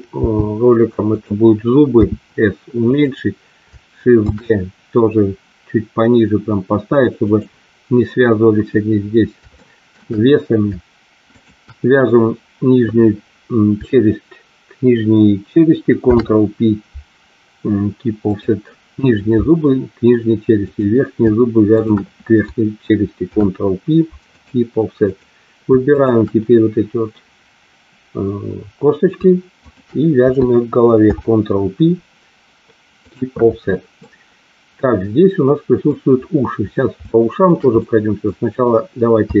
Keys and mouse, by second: 0.2 g, 1.1 click, 1.9 s, 2.8 click, 4.2 shift+d, 7.2 click, 9.5 shift+middle click, 15.9 ctrl+p, 20.7 click, 23.2 ctrl+p, 25.9 shift+click, 29.5 shift+click, 31.0 ctrl+p, 33.9-35.9 middle drag, 36.9 shift+middle click, 37.8 middle click, 39.2 KP_3.